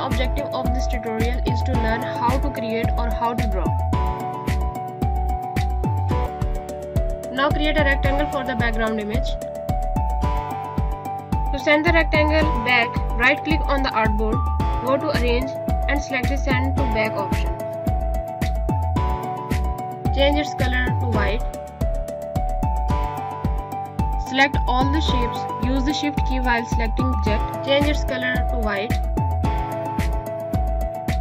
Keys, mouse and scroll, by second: 0.3 click, 0.9 click, 3.5 click, 4.0 click, 5.0 click, 5.5 ctrl+g, 5.8 alt+shift+click, 7.7 right click, 8.4 click, 14.9 right click, 17.3 click, 19.6 Caps_Lock, 21.8 Caps_Lock, 21.8 click, 24.6 click, 25.3 shift+click, 26.1 shift+click, 26.7 shift+click, 27.9 click.